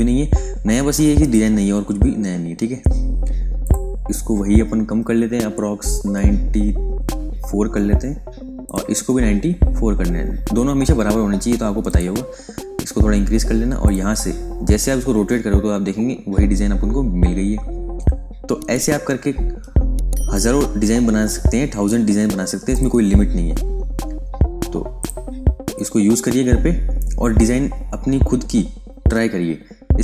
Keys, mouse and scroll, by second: 2.2-3.5 scroll up 1, 3.5 click, 3.9-6.2 scroll down 1, 7.1-8.6 scroll up 1, 8.6 click, 8.8-11.3 scroll down 1, 11.8 click, 12.3-13.8 scroll up 1, 13.8 click, 14.5-16.3 scroll down 1, 16.3 scroll up 1, 22.6 click, 23.0-23.4 scroll down 1, 23.4-24.9 scroll up 1, 24.9 click, 25.2-26.7 scroll up 1.